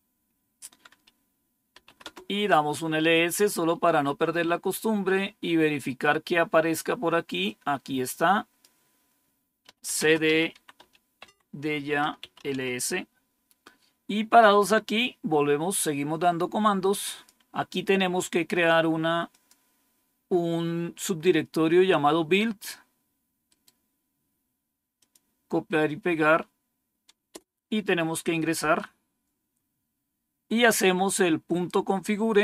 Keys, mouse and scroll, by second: 1.6 typing, 3.6 scroll up 2, 4.9 scroll down 2, 5.3-7.3 scroll up 2, 7.3-8.5 drag, 8.3-12.9 typing, 15.7-17.2 drag, 18.4 right click, 19.2 click, 23.4 right click, 24.9 click, 27.2 Return, 31.9-32.4 drag.